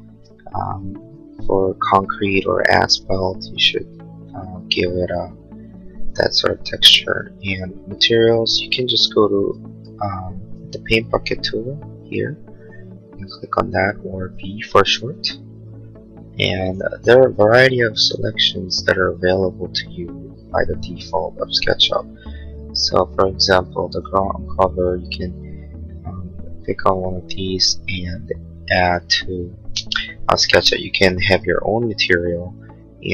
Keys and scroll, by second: 6.1 b.